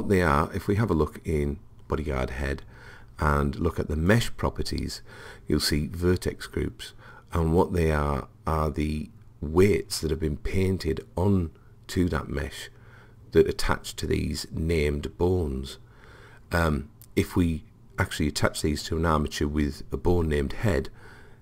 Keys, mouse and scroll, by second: 4.1 click, 6.4-8.9 middle drag.